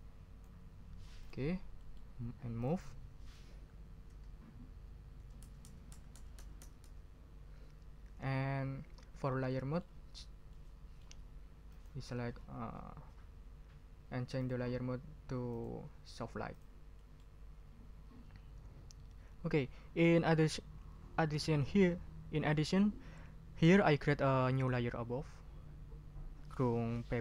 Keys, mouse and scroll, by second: 1.2 click, 1.8 middle click, 2.6 click, 3.5 shift+Down, 5.2 Down, 9.5 click, 10.5 click, 11.7 click, 14.4 click, 15.5 click, 16.5 click, 17.0 middle click.